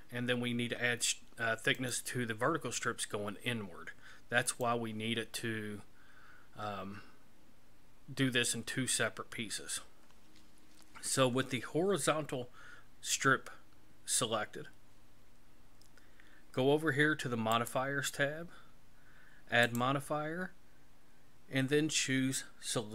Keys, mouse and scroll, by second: 1.8 right click, 4.5 right click, 17.6 click, 19.7 click.